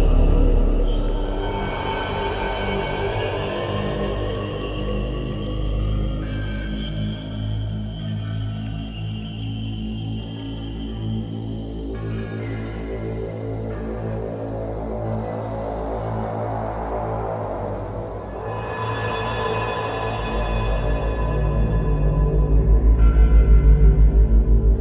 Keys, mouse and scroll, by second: 1.9 click, 3.3 click, 4.2 click, 5.2 click, 8.1 click, 9.9 right click, 11.3 right click, 13.7 click, 14.5 click, 16.0 click, 19.2 click, 22.0 click, 23.4 click.